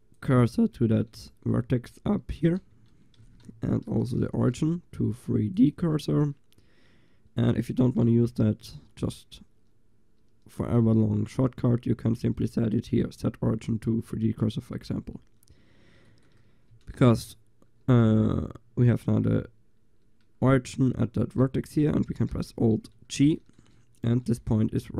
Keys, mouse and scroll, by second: 1.6 g, 2.8 Tab, 3.9 ctrl+alt+shift+c, 10.2-16.0 middle drag, 18.1 g, 22.4 alt+g.